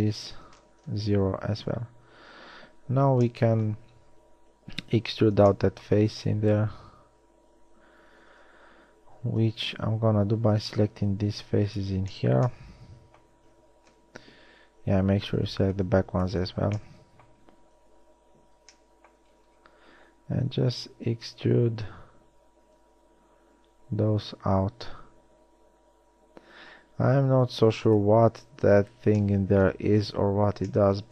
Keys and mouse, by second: 0.5 s, 2.6 KP_1, 9.5 a, 11.1 b, 14.2 KP_1, 14.6 z, 15.7 b, 16.6 z, 18.2 KP_1, 23.1 e.